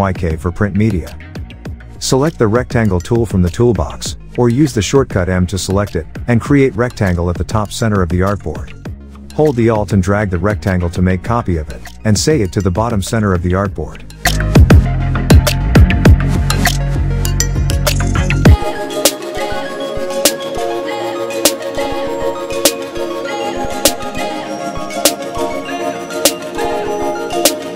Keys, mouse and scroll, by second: 0.0 click, 1.8 Tab, 4.7 click, 6.2 click, 9.4-10.5 alt+drag, 13.5 click, 17.8 click, 18.7 Tab, 19.6 click, 22.7 BackSpace, 24.5 click.